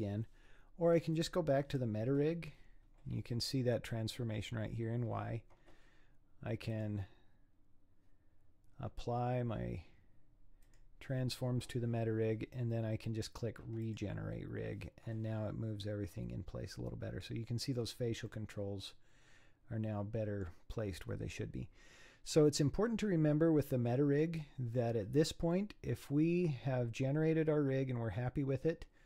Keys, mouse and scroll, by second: 1.2 click, 6.7-9.9 drag, 13.8-15.6 drag, 15.6-16.2 scroll down 4, 16.2-17.7 middle drag, 17.7-18.3 scroll up 6, 18.3-21.2 middle drag, 21.2 scroll down 5, 22.0-22.6 scroll up 4, 22.6-24.9 middle drag, 24.9-25.5 scroll down 4, 25.5-28.1 middle drag, 28.1-28.7 scroll up 4, 28.7 scroll down 3.